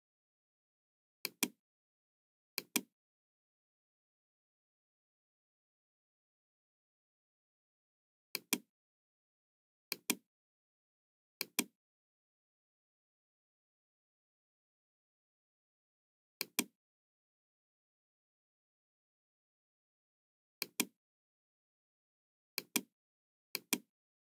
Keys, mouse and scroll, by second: 1.2 click, 2.5-4.8 drag, 8.2 click, 9.8 click, 11.3 click, 13.2-13.6 scroll up 2, 13.7 middle click, 16.3 click, 20.5 click, 22.5 click, 23.5 click.